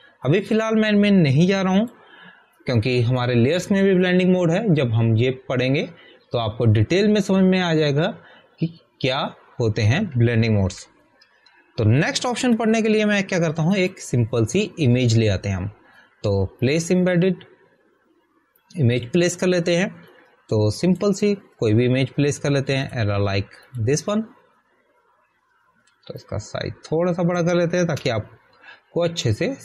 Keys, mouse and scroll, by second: 3.6 click, 12.6 ctrl+d, 14.1 ctrl+d, 15.7 click, 18.5 click, 28.2 alt+click.